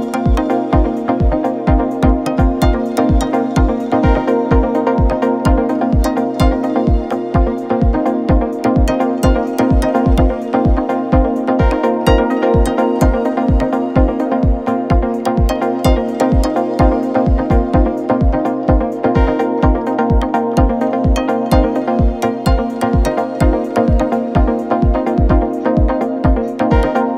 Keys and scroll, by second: 1.4 alt+Tab, 6.3 Return, 8.7 ctrl+t, 22.9 Return.